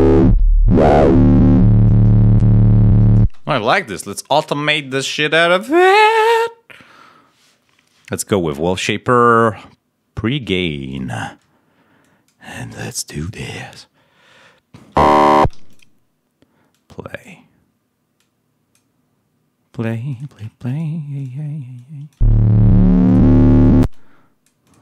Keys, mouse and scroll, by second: 3.1 space, 3.1 click, 3.8 click, 5.5 click, 10.8 click, 11.9 click, 13.1 click, 13.4 scroll down 2, 14.9 space, 15.4 d, 15.6 click, 16.6 click, 18.1 click, 20.0 click, 20.6 shift+right click, 22.1 space, 23.7 space, 23.8-24.8 drag.